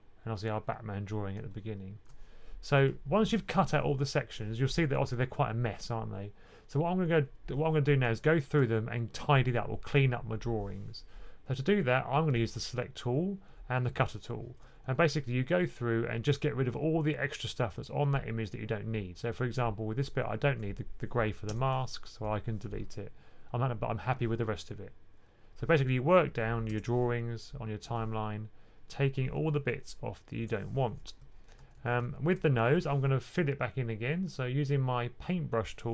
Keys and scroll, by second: 13.4 2, 14.7-15.0 typing, 31.4 typing.